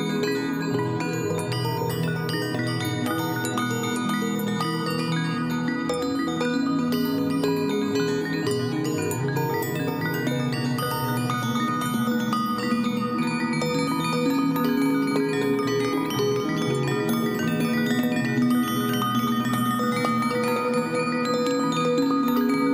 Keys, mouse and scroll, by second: 1.2 ctrl+a, 3.0 ctrl+d, 3.1 ctrl+d, 3.4 Up, 3.5-5.0 Up, 3.9 click, 5.1 click, 10.2 Down.